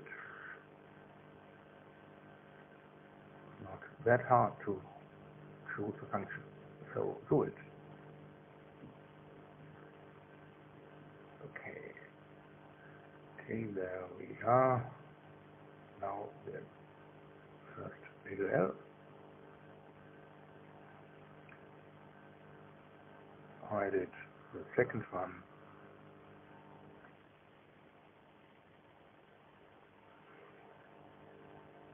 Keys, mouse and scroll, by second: 11.6 click, 12.9 click, 14.0 KP_0, 14.2 KP_Decimal, 14.4 KP_0, 14.6 KP_1, 14.9 KP_Enter, 16.0 space, 16.8 click, 17.9 click, 19.5 click, 20.3 KP_0, 20.5 KP_Decimal, 20.7 KP_0, 21.0 KP_1, 21.2 KP_Enter, 23.6 space, 26.1 click, 27.2 click, 29.6 click, 31.0-31.9 typing.